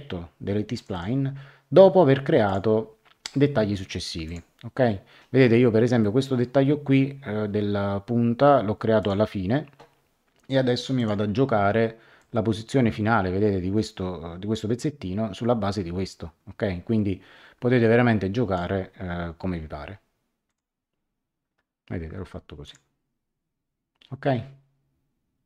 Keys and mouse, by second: 0.7 click, 2.4 click, 4.2 click, 6.0 middle click, 9.0 click, 10.9 click, 12.1 click, 20.4 click, 22.6 click.